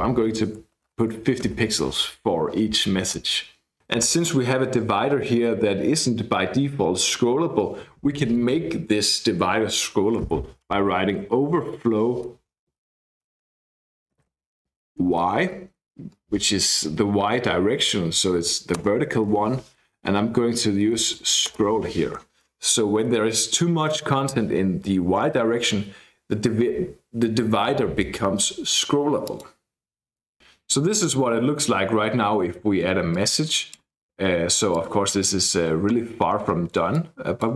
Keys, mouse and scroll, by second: 0.0-1.4 typing, 11.1-15.4 typing, 18.8 Return, 20.6-21.6 typing, 29.2 click, 30.0-30.4 scroll down 1, 33.1 click, 33.9-34.7 scroll down 1, 34.7 click, 36.9 click.